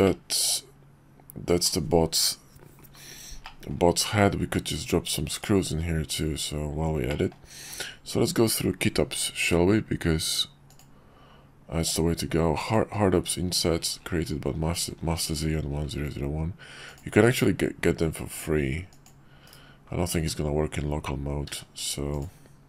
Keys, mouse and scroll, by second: 0.0-1.7 middle drag, 3.4 middle drag, 5.3 click, 6.1 /, 7.1 middle drag, 7.7 q, 9.3 q, 18.9 click, 19.5 /, 20.2 q, 21.5 q, 22.2 q.